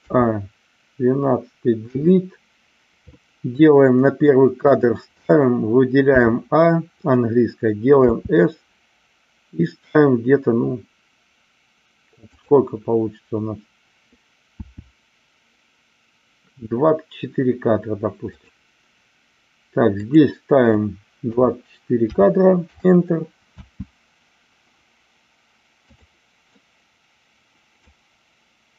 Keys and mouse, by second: 0.0 a, 1.8 Delete, 4.7 click, 6.0 a, 8.1 s, 12.3 click, 14.6 s, 18.3 click, 20.1-22.9 drag, 23.5 space, 26.0 click, 26.5-28.0 middle drag.